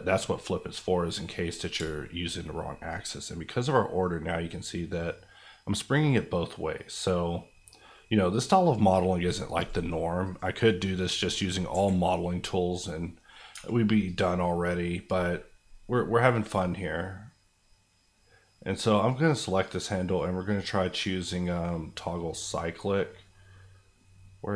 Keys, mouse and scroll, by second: 1.7-5.0 shift+drag, 10.6 middle click, 11.0 scroll down 1, 11.7 KP_1, 12.9 middle click, 13.5 Tab, 14.0 click.